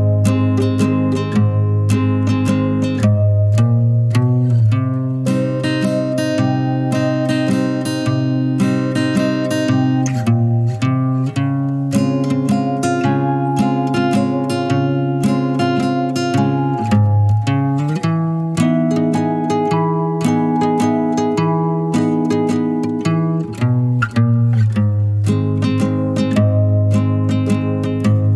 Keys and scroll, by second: 12.2-13.5 typing, 26.5 typing.